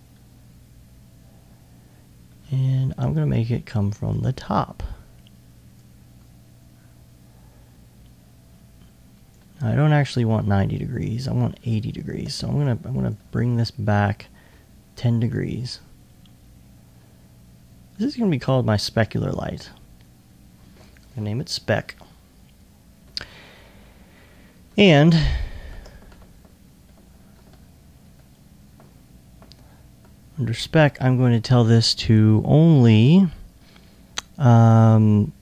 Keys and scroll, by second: 0.7 alt+2, 4.6 shift+r, 5.9 shift+e, 6.6 e, 26.1 alt+1, 27.3 alt+2.